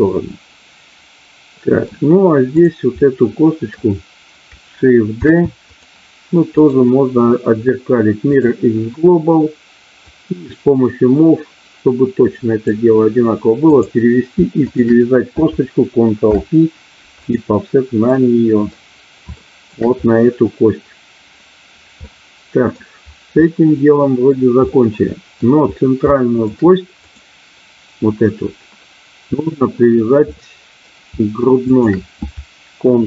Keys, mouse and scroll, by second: 2.5 click, 2.9 middle click, 5.1 shift+d, 6.5-8.4 right drag, 10.0-12.6 drag, 13.6 click, 16.1 ctrl+p, 18.1 middle click, 19.4 shift+middle click, 22.0 middle click, 23.4 middle click, 24.6 middle click, 26.0 shift+middle click, 30.4 middle click, 31.6 shift+click.